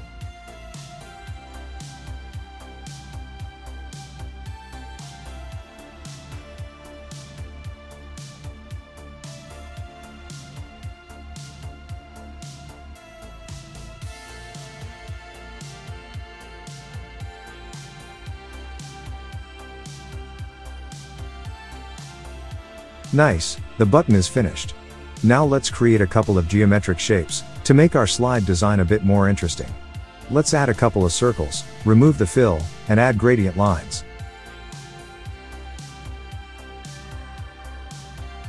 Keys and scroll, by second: 0.1 BackSpace, 10.9 Tab.